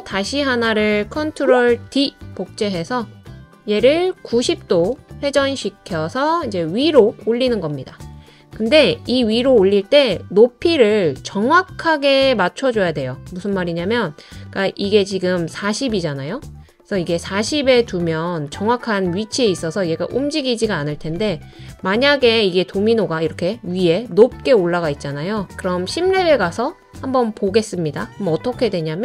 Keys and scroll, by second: 1.9 super+d.